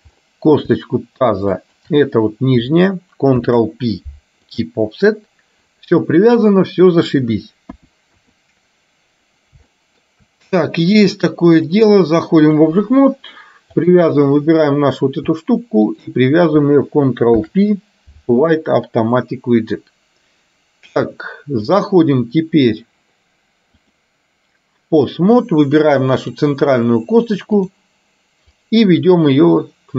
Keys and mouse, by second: 1.7 shift+click, 3.4 ctrl+p, 7.7 KP_2, 8.2 KP_3, 9.8 shift+middle click, 11.8-12.9 drag, 15.9 shift+click, 17.4 ctrl+p, 21.8 click, 23.9-25.4 drag, 26.2 click, 28.6-29.9 drag.